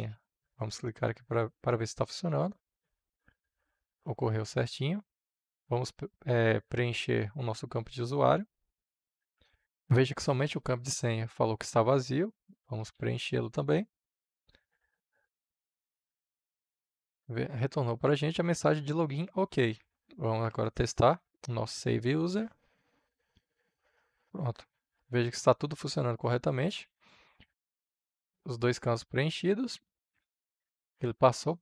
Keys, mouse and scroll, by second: 7.4-8.4 typing, 8.7-12.6 drag, 12.3-13.9 typing, 15.5-31.6 drag.